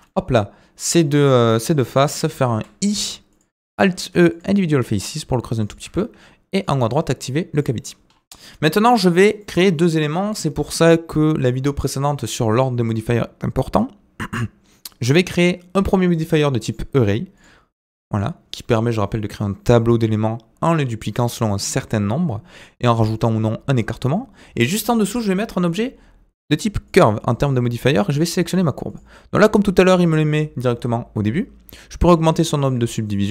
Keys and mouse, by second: 0.0-2.1 middle drag, 2.5 i, 3.7 alt+e, 5.8 Tab, 6.7-7.7 drag, 8.3-8.8 middle drag, 9.4-10.0 middle drag, 16.6 click, 17.4-18.2 drag, 24.8-26.9 drag, 32.1-33.3 drag.